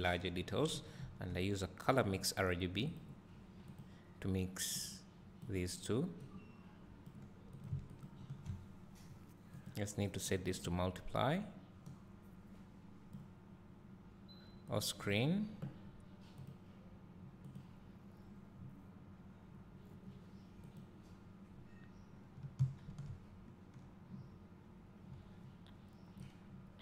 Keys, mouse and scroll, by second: 6.0-7.8 drag, 8.3 ctrl+shift+click, 10.6-15.1 drag, 17.8-20.9 drag, 26.4 click.